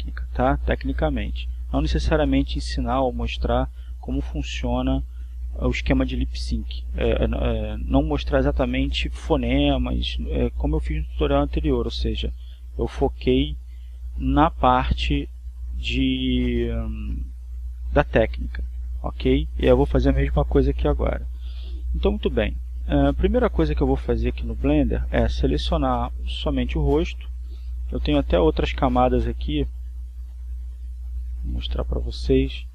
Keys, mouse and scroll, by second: 0.4 click, 4.7 click, 6.7 click, 14.7 click, 17.0 click, 30.0 click, 32.6-32.7 drag.